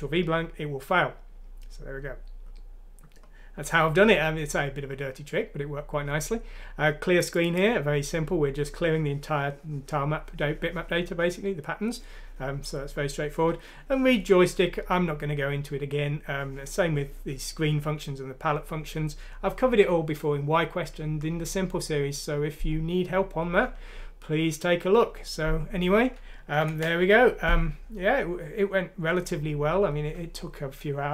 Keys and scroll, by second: 26.6 ctrl+Home.